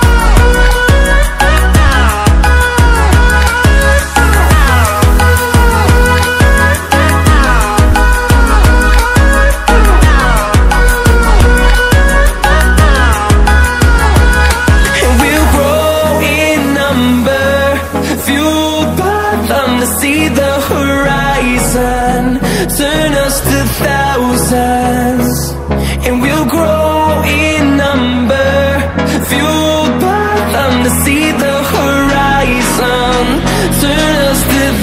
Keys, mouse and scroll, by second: 0.7-4.2 drag, 4.8-5.1 ctrl+alt+scroll down 2, 5.1-5.5 ctrl+alt+scroll up 2, 6.0-10.3 drag, 10.3-11.2 ctrl+alt+scroll down 2, 12.2 ctrl+alt+scroll up 1, 13.0-14.9 drag, 14.9 ctrl+alt+scroll down 1, 15.4 ctrl+click, 16.0-16.3 ctrl+alt+scroll down 1, 16.8-17.1 ctrl+alt+scroll up 1, 17.3-19.8 drag, 20.6 ctrl+alt+scroll down 1, 21.0 ctrl+alt+scroll up 1, 23.0-33.6 drag, 34.6 ctrl+alt+scroll down 1.